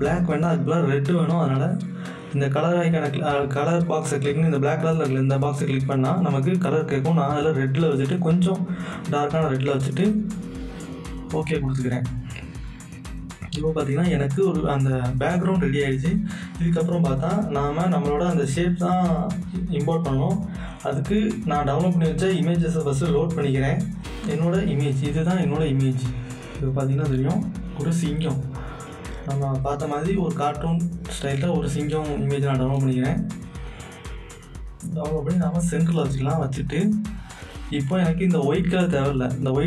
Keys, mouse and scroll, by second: 0.8 click, 7.1-13.7 drag, 14.2 click, 18.3 click, 20.9 click, 20.9 click, 23.9-27.8 drag, 28.6-35.8 drag, 35.8 Return.